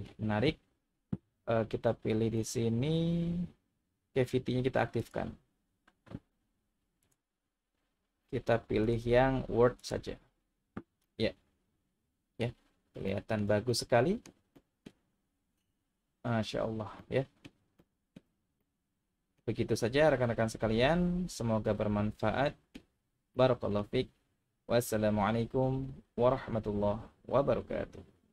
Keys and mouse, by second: 2.3-5.8 drag, 7.1-10.4 drag, 11.1-12.4 middle drag, 13.0-13.4 shift+middle drag, 13.7-14.3 middle drag, 14.5-14.8 shift+middle drag, 17.0-17.5 middle drag, 17.8-18.1 shift+middle drag, 18.6 middle click, 22.5 middle click, 23.3-23.8 middle drag.